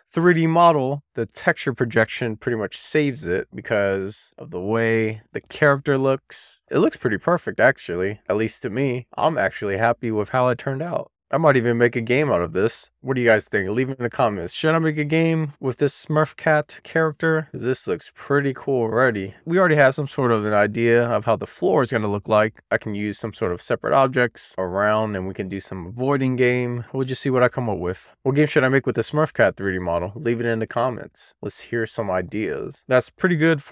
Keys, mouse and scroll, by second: 2.6 middle click, 3.8 scroll down 1, 4.1 shift+middle click, 5.5 click, 11.8-13.9 middle drag, 14.7 click, 15.2 click, 26.0 middle click, 26.9-27.2 scroll down 1, 27.2 middle click, 27.8-29.9 scroll up 2, 29.9-30.3 scroll down 1, 30.3-32.8 scroll up 1.